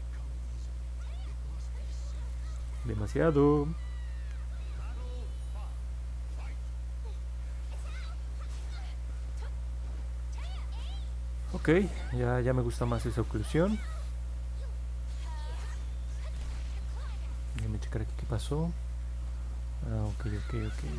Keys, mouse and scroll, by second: 3.2 ctrl+z, 4.3-8.9 drag, 10.3-10.8 scroll down 2, 11.1 middle click, 11.6-13.3 alt+drag, 13.6-14.1 scroll up 2, 14.6 alt+middle click, 15.2 middle click, 15.6 alt+click, 17.0 alt+middle click, 17.7-20.9 alt+drag.